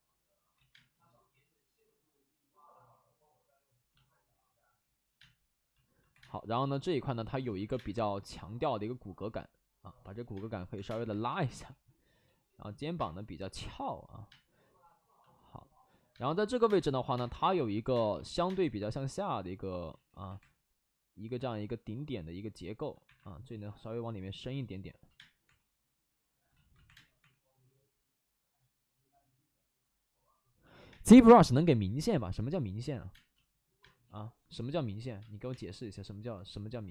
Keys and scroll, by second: 0.5 ctrl+z, 0.6 1, 0.6 space, 0.7 3, 5.1 space, 6.0 2, 6.1 space, 7.3 ctrl+z, 7.6 space, 7.6 1, 10.3-11.4 typing, 12.9 space, 14.2 space, 16.0-18.4 typing, 19.8 ctrl+z, 20.0 ctrl+z, 20.3 2, 23.0 1, 25.1 space, 25.4 3, 26.4 ctrl+z, 26.8 3, 26.8 space, 27.1 3, 30.8 space, 33.0 space, 33.7 space, 35.1 space, 35.4 3.